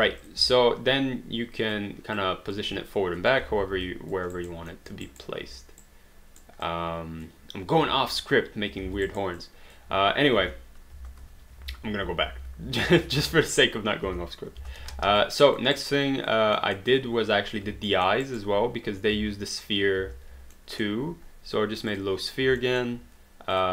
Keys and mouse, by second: 0.5 alt+click, 2.1 alt+click, 3.8 alt+click, 4.3 alt+right click, 4.7 alt+middle click, 5.1 alt+right click, 6.7 click, 8.8 alt+d, 9.0 alt+right click, 9.4 alt+click, 10.4 space, 12.0 ctrl+z, 14.1 space, 14.9 alt+d, 15.2 alt+click, 15.7 alt+right click, 16.0 alt+click, 16.6 alt+middle click, 17.9 alt+middle click, 18.3 alt+right click, 19.1 space, 20.6 alt+middle click, 22.0 click, 22.7 alt+middle click, 23.5 click.